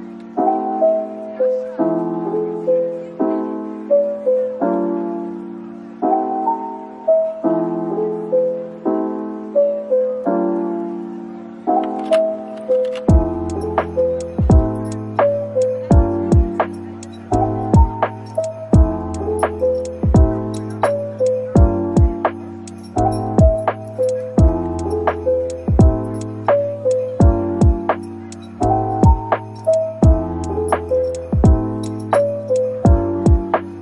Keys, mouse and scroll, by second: 1.2 middle click, 2.1 typing, 2.6-2.9 scroll down 1, 2.9 middle click, 4.5-4.8 typing, 6.5 typing, 8.2 middle click, 9.9-10.6 typing, 12.2 middle click, 12.9 scroll down 1, 13.3 middle click, 19.2 typing, 20.5 typing, 25.8 double click, 27.1 typing, 28.6-29.9 typing, 31.2 typing, 31.8 scroll down 1, 32.5-33.4 typing.